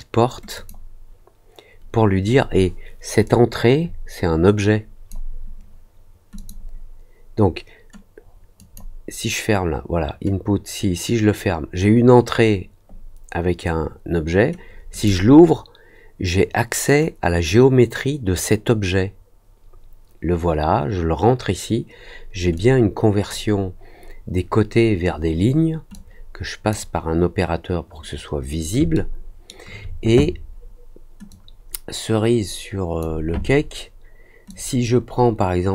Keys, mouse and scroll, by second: 0.5 click, 3.2-5.0 drag, 6.3 click, 8.5 click, 14.8 click, 22.5 click, 25.9-26.6 drag, 28.9 alt+middle click, 31.2-32.9 drag, 34.4-35.7 drag.